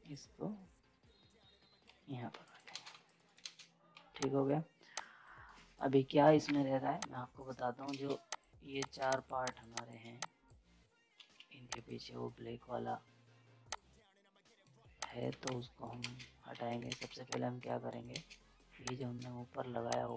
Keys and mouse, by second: 2.3 z, 2.4 right click, 2.9 z, 3.0 right click, 3.4 ctrl+space, 3.9 z, 4.2 click, 5.4 right click, 6.5 z, 7.0 click, 7.9 ctrl+space, 8.3 click, 9.1 shift+click, 11.2 ctrl+z, 11.7-15.0 drag, 15.3 z, 15.4 click, 15.4 click, 16.0 ctrl+space, 16.5 z, 16.6 right click, 17.1 z, 17.3 click, 17.8 right click, 18.1 ctrl+space, 18.8 click.